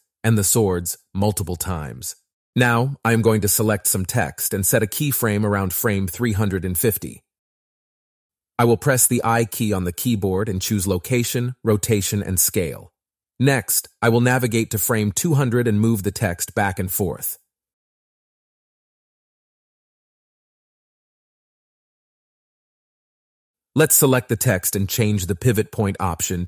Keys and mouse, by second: 0.7 click, 1.8 click, 2.0 click, 2.7 shift+click, 2.9 shift+click, 3.1 shift+click, 3.6 shift+click, 4.4-5.9 drag, 7.4-9.2 drag, 9.9 i, 11.3-12.6 drag, 13.2 click, 14.1 click, 14.5 click, 15.4 shift+click, 15.8 shift+click, 17.0 shift+click, 17.6 click, 20.0 click, 20.3 click, 23.3 shift+click, 23.7 shift+click, 24.5 shift+click, 24.7 click, 25.2 shift+Down.